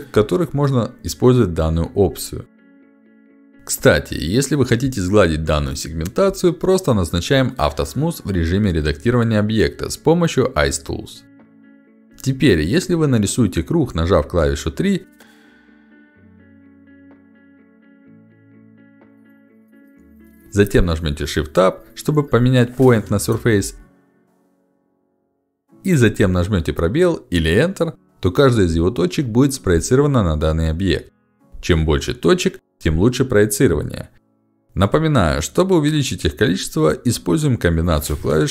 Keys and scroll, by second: 4.0 Escape, 9.2 ctrl+shift+x, 15.7 ctrl+shift+x, 18.9 3, 29.5 space, 35.4 alt+shift+x.